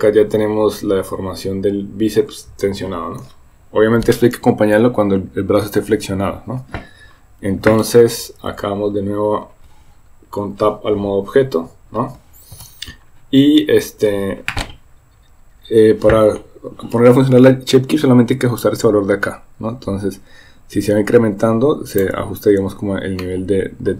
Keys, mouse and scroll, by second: 8.8 Tab, 18.7-22.1 drag, 23.2 middle click.